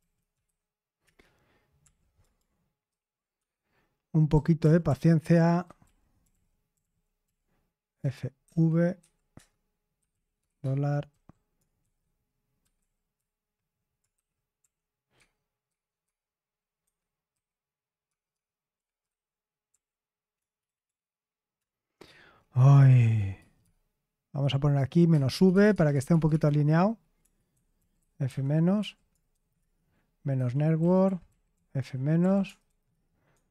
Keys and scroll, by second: 0.0-8.9 typing, 1.0 Return, 9.3 Return, 9.9 Escape, 10.1-12.7 typing, 14.1-26.2 typing, 16.8 Escape, 27.2-33.5 typing, 29.5 Return, 32.8 Return.